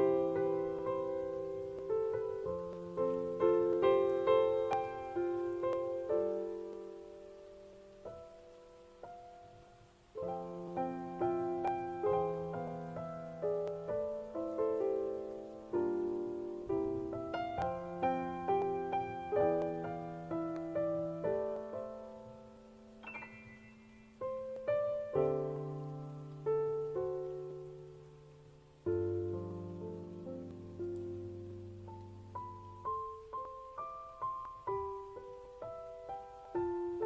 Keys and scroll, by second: 1.7 ctrl+z, 8.9 ctrl+z.